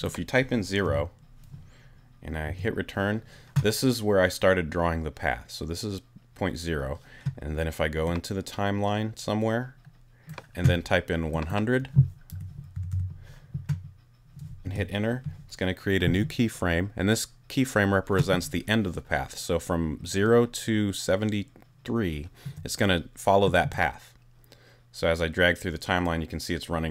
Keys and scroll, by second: 0.8 0, 2.5 Return, 12.3 i, 12.7 0, 14.6 Return.